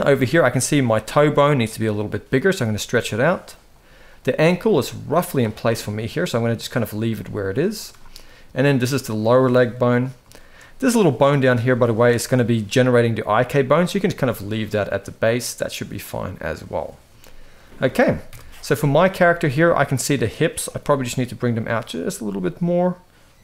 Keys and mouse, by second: 0.5 click, 0.7 g, 2.2 click, 2.3 g, 3.8 click, 4.1 g, 5.7 g, 6.4 click, 6.7 g, 7.7 shift+middle drag, 10.1 shift+middle click, 11.5 shift+middle click, 11.9 click, 13.7-16.0 middle drag, 17.0 shift+middle click, 18.0 KP_1, 18.7 shift+middle click, 19.3 shift+middle click, 20.5 g, 21.6 click, 21.8 g.